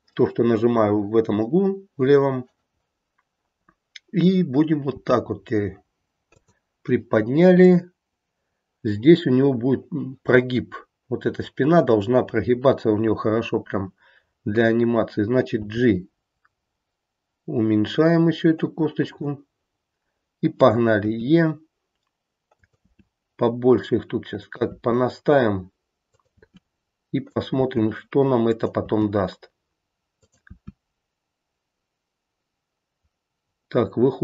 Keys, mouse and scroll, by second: 4.9 g, 7.6 click, 15.4 g, 21.0 e, 22.8 e, 26.3 e, 27.6 e, 30.5 e.